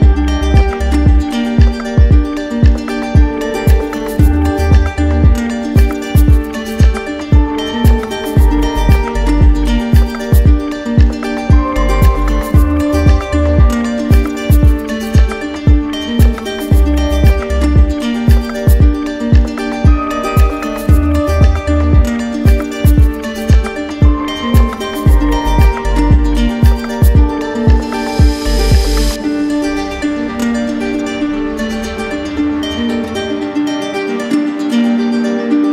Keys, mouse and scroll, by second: 0.6 click, 2.7 click, 3.4 right click, 4.0 alt+right click, 6.8 click, 7.7 ctrl+z, 9.0 click, 10.0 right click, 11.3 right click, 12.3 right click, 13.0 alt+right click, 14.3 ctrl+click, 15.3 alt+right click, 16.0 ctrl+click, 16.3 ctrl+click, 17.4 right click, 21.9 right click, 22.6 click, 24.5 z, 26.1 click, 27.1 click, 29.8 w, 32.3-33.6 ctrl+drag, 33.7-35.7 ctrl+drag.